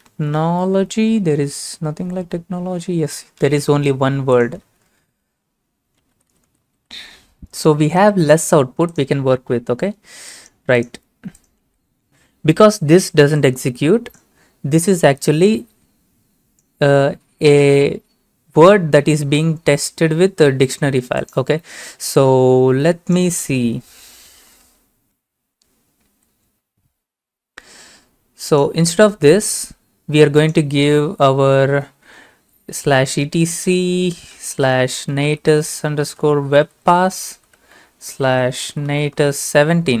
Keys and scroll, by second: 4.6 ctrl+v, 5.8-7.3 typing, 7.7 ctrl+a, 8.0 ctrl+c, 11.7 ctrl+v, 25.2 ctrl+a, 26.2 ctrl+c, 33.9-37.6 typing, 38.7-40.0 typing.